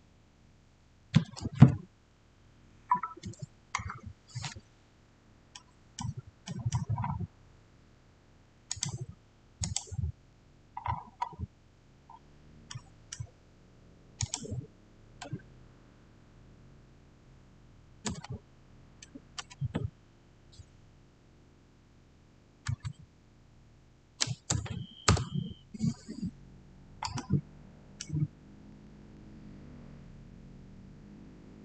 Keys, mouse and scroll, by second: 5.4 click, 5.4-6.9 middle drag, 6.9 scroll up 1, 8.6 click, 10.7-11.3 scroll up 1, 12.6-14.1 middle drag, 14.1 click, 18.0 click, 18.0 5, 19.2 0, 22.5 0, 23.3 Tab, 24.1 typing, 24.9 Return, 26.4-27.1 scroll down 1, 27.1-30.2 middle drag.